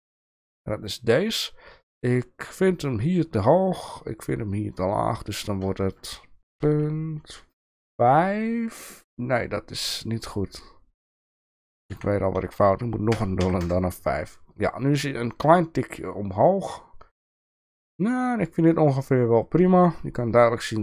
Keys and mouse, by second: 5.8-14.3 drag.